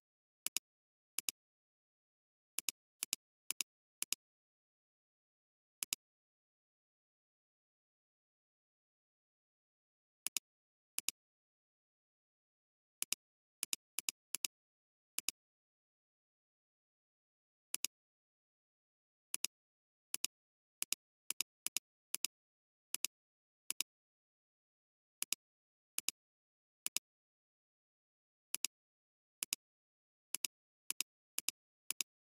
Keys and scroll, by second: 10.2 alt+space, 11.6 alt+space, 17.7 alt+space, 25.1 alt+space.